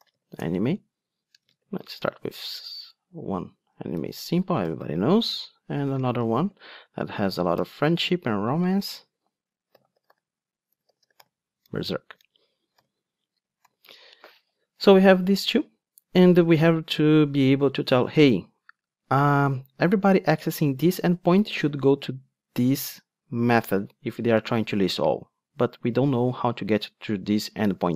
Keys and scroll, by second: 0.4 Return, 7.7 Return, 13.7 alt+super+l.